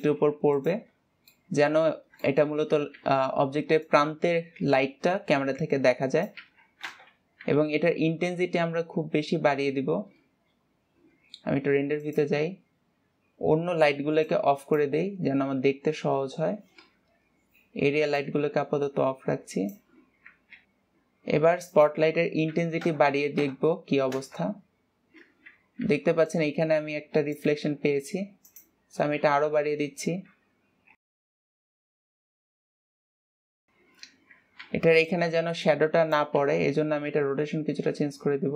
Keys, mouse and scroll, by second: 1.4-1.8 scroll up 4, 1.8-2.6 middle drag, 2.6-3.2 scroll up 2, 2.7-3.0 shift+middle drag, 7.4 KP_0, 8.7-11.9 scroll down 1, 12.5 click, 14.8 click, 15.7-17.4 scroll down 10, 17.4-18.6 scroll up 5, 18.6-20.6 drag, 24.7 click, 29.1-31.3 drag, 31.6 KP_0, 32.2 click, 32.9 KP_0, 33.0 KP_0.